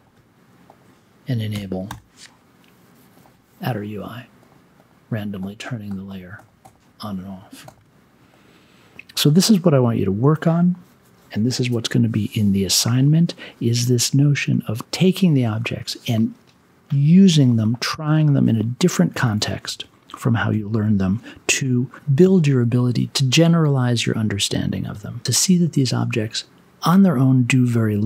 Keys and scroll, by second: 1.5 e, 1.8 n.